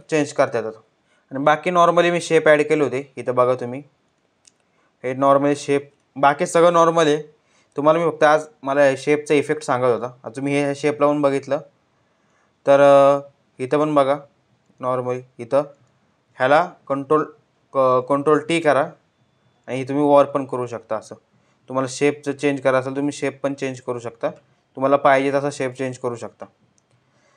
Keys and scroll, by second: 16.5 ctrl+y, 17.7 ctrl+t.